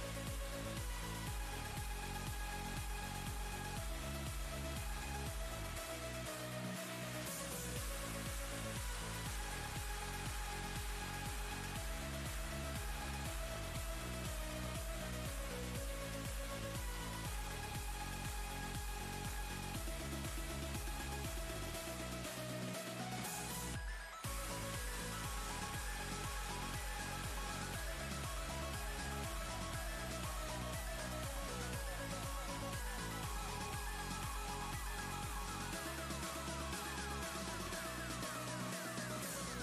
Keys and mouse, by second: 0.2 click, 4.3 click, 8.6 click, 13.6 ctrl+z, 14.7 click, 16.1-19.4 typing, 20.9 Return, 22.0-24.7 typing, 31.5 Return, 32.5-34.0 typing, 35.3-38.2 typing.